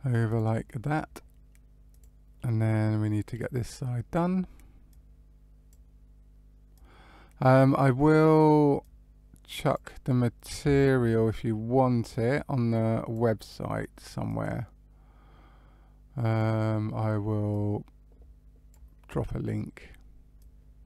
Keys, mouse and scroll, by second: 0.2 click, 1.8 click, 2.3 middle click, 3.6-4.8 scroll down 2, 4.8 click, 6.7 click, 8.7 click, 10.3 scroll down 1, 10.7 shift+middle click, 12.0 click, 14.2 click, 17.4 click, 20.3 click.